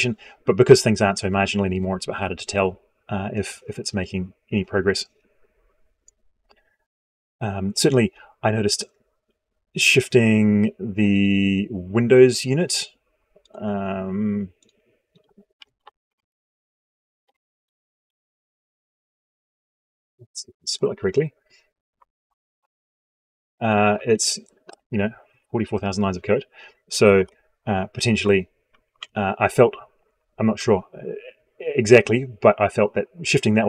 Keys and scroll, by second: 24.1 ctrl+End, 27.0 ctrl+Home, 28.8 ctrl+F4.